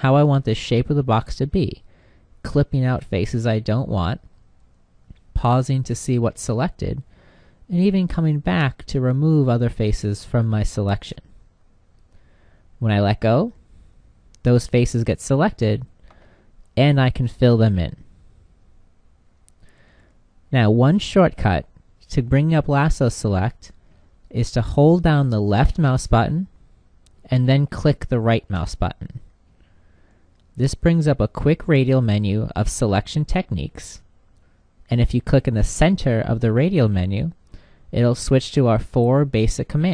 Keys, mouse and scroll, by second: 23.8-29.5 drag, 26.9-32.9 right drag.